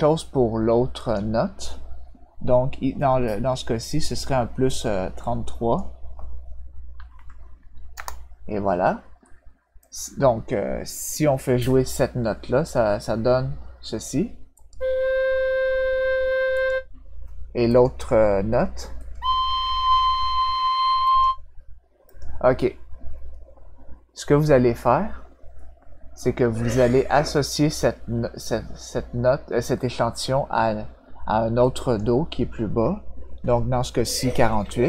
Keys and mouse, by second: 0.9 click, 5.2 click, 7.9 Return, 9.8 click, 14.5 click, 16.5 click, 17.7 click, 18.9 click, 21.0 click, 22.0 click, 31.6 click.